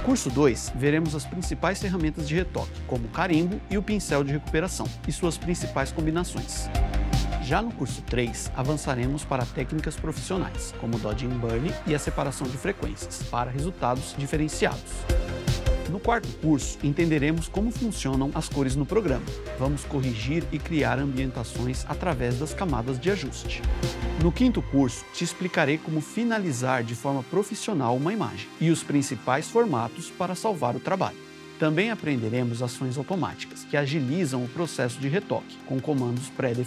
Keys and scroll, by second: 11.5 super+-, 11.6 super+=, 11.8 super+=, 23.4 super+=, 25.9 super+-, 26.8 super+-.